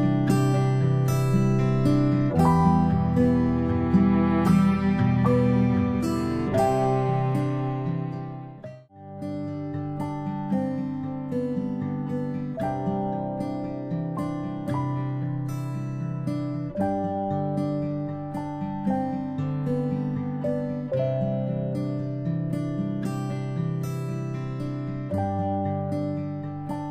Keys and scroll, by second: 2.7-3.1 ctrl+space, 3.4 p, 14.2 v, 16.6 ctrl+c, 24.1 ctrl+shift+g.